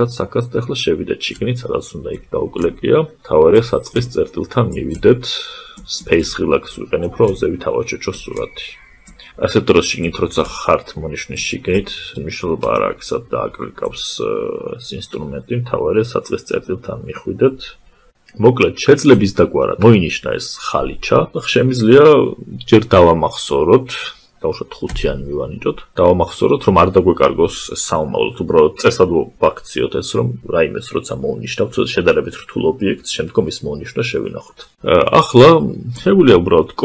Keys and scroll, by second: 35.9 ctrl+shift+j.